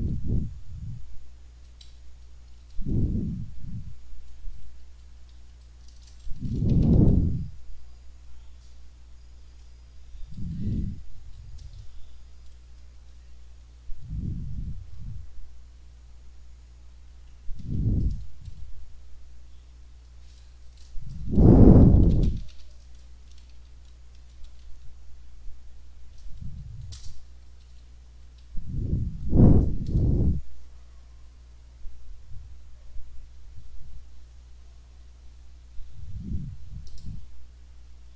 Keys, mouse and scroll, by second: 1.0 Left, 1.9 Down, 2.5 Left, 4.2 Left, 4.8 Up, 5.3 End, 6.0 Return, 6.2-7.5 typing, 10.3 Down, 11.2 Up, 11.7 Return, 13.2 shift+Delete, 15.7 Delete, 17.6 End, 20.7 Return, 21.3-24.1 typing, 27.0 Return, 27.7 Up, 29.9 F5, 36.9 click.